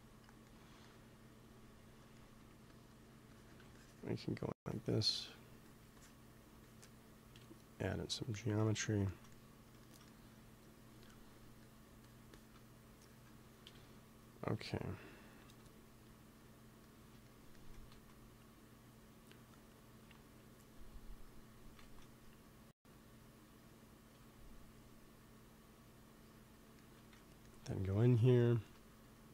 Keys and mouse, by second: 2.4 f, 3.3-8.3 drag, 7.2 KP_1, 8.3 middle click, 11.9-14.6 drag, 13.5 KP_1, 15.3 KP_1, 17.8 ctrl+s, 21.7 ctrl+s, 26.7-28.6 middle drag, 27.0 x, 28.8 f.